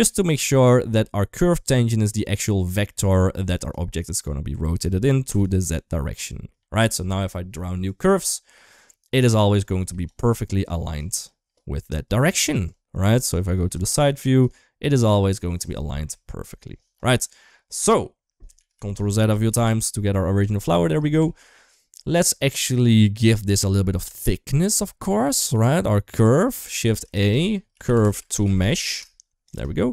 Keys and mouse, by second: 1.4-3.6 drag, 6.8 Tab, 7.6 click, 9.3 click, 11.0 click, 12.3 middle click, 13.1 click, 14.1-15.2 middle drag, 15.5 Tab, 15.8 KP_1, 16.2 KP_3, 17.1 shift+middle click, 17.6 Tab, 18.5 ctrl+z, 18.7 ctrl+z, 18.9 ctrl+z, 19.0 ctrl+z, 19.2 ctrl+z, 19.4 ctrl+z, 19.6 ctrl+z, 20.5 shift+middle drag, 21.1 shift+middle click, 24.1-26.2 shift+middle drag, 26.7 shift+a.